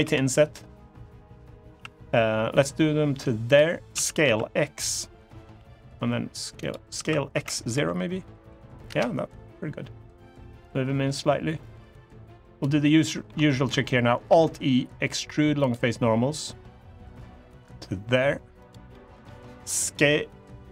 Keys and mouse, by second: 3.2 click, 4.0 s, 4.0 x, 6.3 click, 6.7 s, 7.1 x, 7.5 0, 8.6 Return, 10.3-12.3 drag, 12.6 middle click, 13.2 shift+middle click, 14.0 alt+e, 18.3 click, 18.6 middle click, 20.5 middle click.